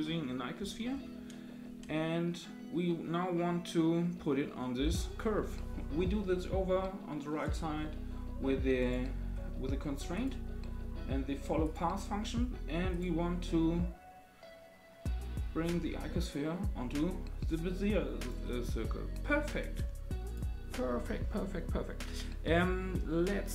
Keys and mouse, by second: 7.4 click, 8.8 click, 10.2-11.7 drag, 13.0-18.3 drag.